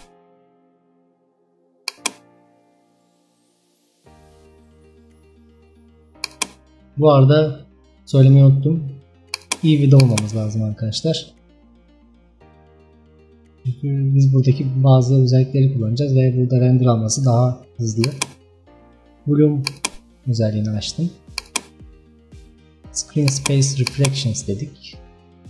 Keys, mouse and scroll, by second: 2.7-11.3 drag, 11.3-11.7 scroll up 3, 18.0 click, 23.3 click.